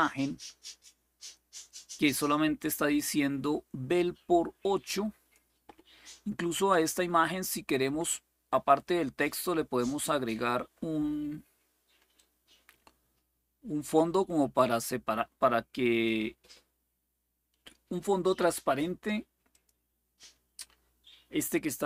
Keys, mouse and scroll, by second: 0.0-1.1 drag, 1.4-5.1 drag, 9.6 click, 11.9-15.8 drag, 19.3 click.